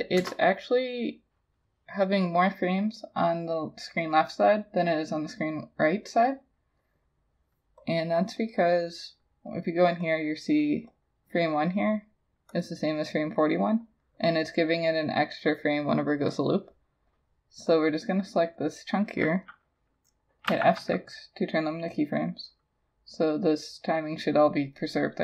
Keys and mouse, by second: 0.2 Return, 8.6 double click, 20.5 F6.